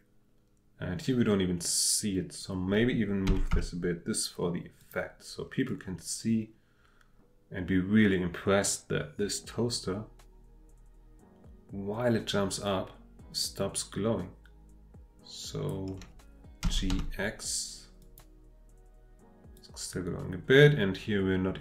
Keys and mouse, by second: 3.2 g, 3.5 x, 4.8 click, 5.7-15.7 drag, 16.6 g, 16.9 x, 18.0 click, 19.5-21.6 drag.